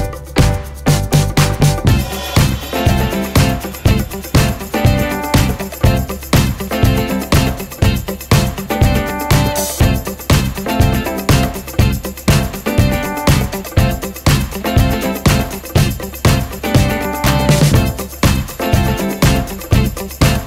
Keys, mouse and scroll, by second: 11.1 click, 16.9 F4, 18.5 click.